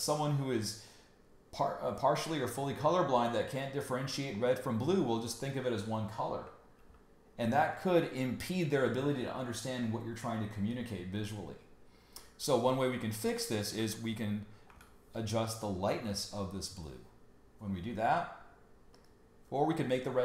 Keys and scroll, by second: 6.8 super+y, 14.7 super+u.